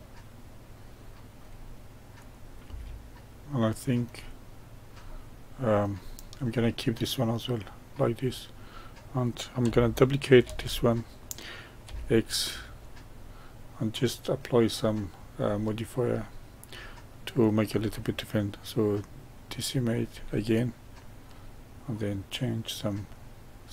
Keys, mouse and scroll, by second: 2.1 click, 2.6 g, 3.4-4.4 middle drag, 4.4-5.0 scroll up 1, 5.0-6.0 middle drag, 6.0-6.5 scroll down 1, 6.5-9.6 middle drag, 10.4 shift+d, 13.2-14.8 middle drag, 14.8-15.4 scroll up 1, 15.4-17.4 middle drag, 17.4-20.4 drag, 21.2-23.7 drag.